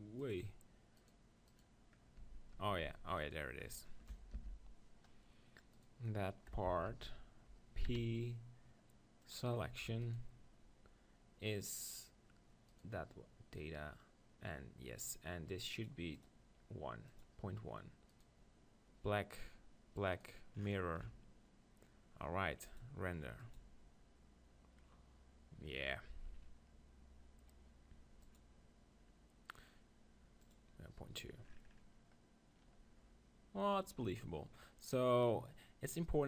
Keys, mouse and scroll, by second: 1.1-5.0 right drag, 2.3 Tab, 2.6 Tab, 2.9 Tab, 4.4 ctrl+l, 5.7-7.5 right drag, 6.9 ctrl+l, 7.9 p, 9.7 Tab, 10.0-13.1 drag, 12.7 right click, 13.7 right click, 15.8-18.1 drag, 19.0-22.0 right drag, 22.7-26.0 drag, 28.2-34.1 drag, 34.1-36.2 middle drag.